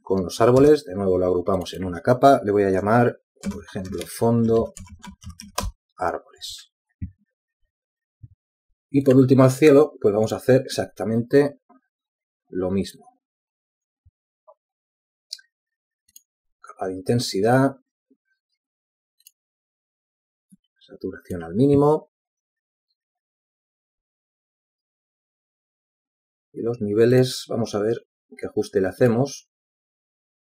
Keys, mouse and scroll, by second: 2.4 shift+click, 3.5 ctrl+g, 6.4-8.4 typing, 8.6 Return.